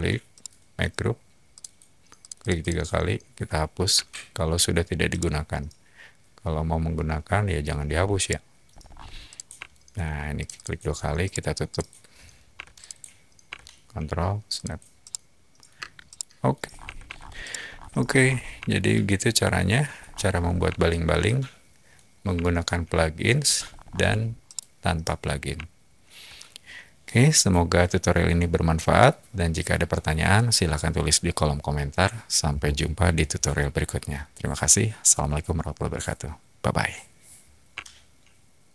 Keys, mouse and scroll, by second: 0.4 shift+right click, 1.5 shift+click, 2.2 click, 2.4 click, 2.6 click, 4.1 shift+Delete, 5.1-7.5 shift+middle drag, 7.8 scroll up 1, 7.8 shift+scroll, 8.1 shift+middle click, 8.7 shift+scroll, 9.2 shift+click, 9.6-10.0 shift+middle drag, 10.4 click, 10.5 click, 10.8 scroll up 2, 11.2 middle drag, 11.6 click, 12.5 p, 12.8 click, 14.5 ctrl+click, 15.0 middle click, 15.7 space, 16.0-16.4 middle drag, 16.6-17.2 scroll down 4, 16.8 Escape, 17.4-17.8 middle drag, 17.7 scroll up 1, 17.8 middle click, 17.8-18.3 scroll down 2, 18.6-19.7 shift+middle drag, 19.9-20.4 scroll down 2, 20.7-21.8 shift+middle drag, 22.5-23.3 shift+middle drag, 23.5 shift+middle click, 24.4-26.2 middle drag.